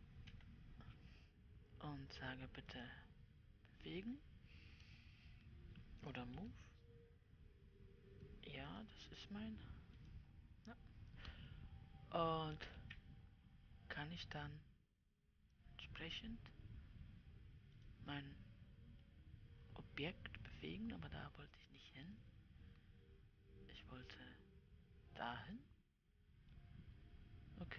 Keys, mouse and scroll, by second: 0.8 Return, 3.3-6.9 drag, 6.9 m, 9.2-10.6 drag, 13.3 g, 19.5-24.3 middle drag, 24.3-27.0 drag, 27.0-27.7 middle drag.